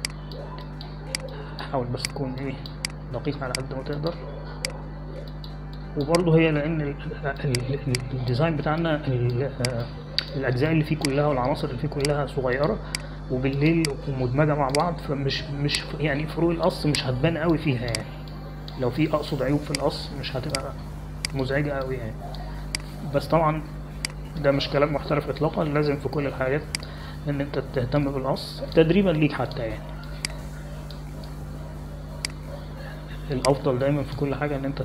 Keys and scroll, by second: 9.3 space, 22.5 space.